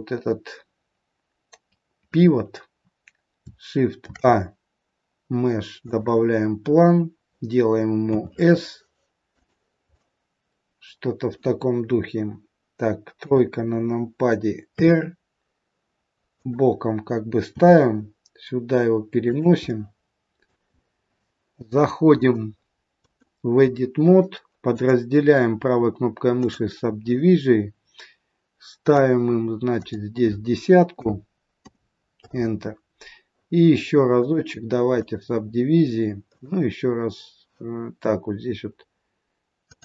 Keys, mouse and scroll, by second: 3.9 shift+a, 8.1 s, 9.9 middle click, 13.2 KP_3, 14.7 r, 17.4 g, 19.6 middle click, 20.6-21.0 scroll up 4, 22.2 click, 24.7 right click, 28.9 click, 29.6 click, 34.1 right click, 36.3 right click, 39.7 click.